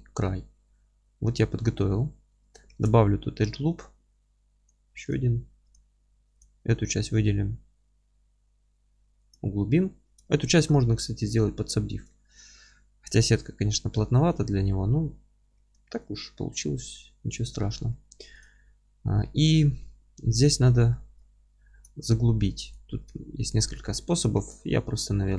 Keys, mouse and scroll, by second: 0.8-1.6 scroll up 2, 1.9-2.7 scroll up 1, 2.7 ctrl+r, 5.7 click, 6.1 3, 6.4 click, 6.6-9.3 middle drag, 7.1 g, 9.3 click, 9.9-17.3 middle drag, 15.5 ctrl+r, 17.3 click, 17.6 scroll down 1, 17.9 middle click, 18.1 3, 18.4 click, 18.8-20.1 alt+middle drag, 20.9 middle click, 21.2 alt+middle click, 21.3-22.5 alt+middle drag, 22.6 click, 23.1-25.3 alt+middle drag, 24.3 ctrl+r.